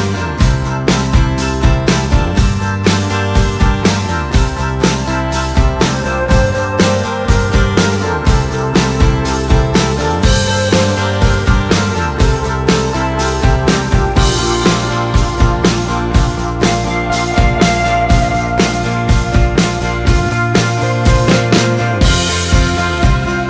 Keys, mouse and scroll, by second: 3.3 click, 10.6-19.5 drag.